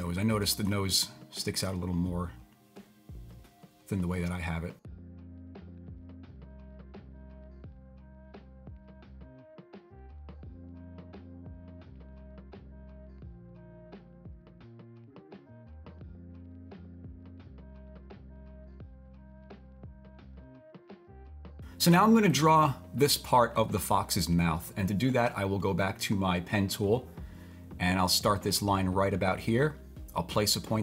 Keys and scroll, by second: 14.2 super+z.